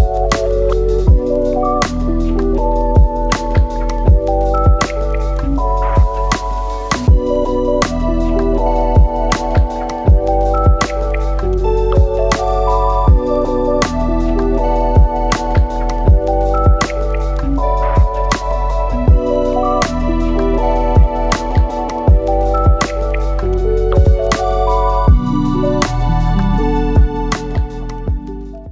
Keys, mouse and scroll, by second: 1.5-5.5 drag, 5.5 middle click, 6.2-8.3 drag, 10.2-11.3 scroll down 3, 11.3-13.9 drag, 14.4-16.2 drag, 16.2 shift+a, 18.7 click, 23.1 space, 24.4-26.3 middle drag, 26.3 scroll down 2.